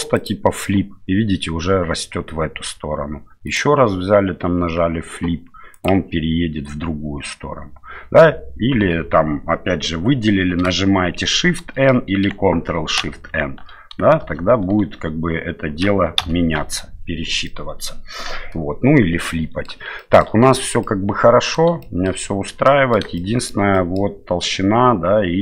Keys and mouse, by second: 3.4-5.8 drag, 11.2 shift+n, 13.1 ctrl+shift+n, 14.2 shift+n, 16.2 ctrl+shift+n, 17.5-19.7 middle drag, 20.0 shift+middle click, 20.8 middle click, 21.8 shift+middle click, 22.7 middle click, 23.2 shift+middle click, 23.7 middle click.